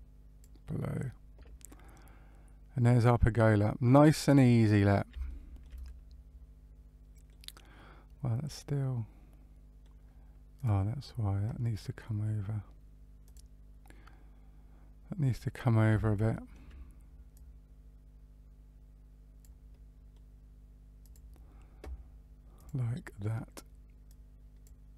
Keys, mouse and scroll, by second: 1.7 middle click, 5.2 shift+middle click, 5.8 middle click, 8.5 middle click, 10.5 click, 13.2 click, 14.9-15.4 scroll up 1, 15.4-16.0 scroll up 2, 16.0 shift+middle click, 17.3 click, 19.6 middle click, 21.0 click, 22.5 click, 24.0 click.